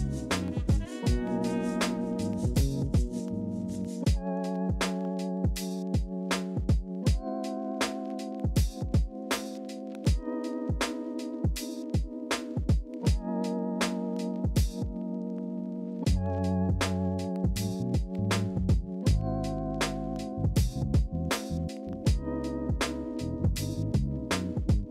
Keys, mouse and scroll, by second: 0.3 ctrl+z.